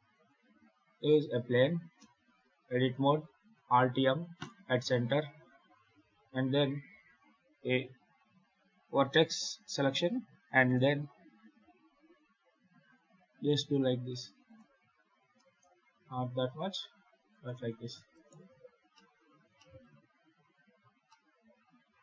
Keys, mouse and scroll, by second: 1.8 Tab, 3.4 alt+m, 6.0 1, 9.4 a, 10.5 e, 15.2 g, 18.0 right click, 18.4 scroll up 3, 18.8 shift+middle click, 19.4 shift+middle click, 19.8 scroll down 1, 20.2-20.7 scroll up 3, 20.9 shift+middle click.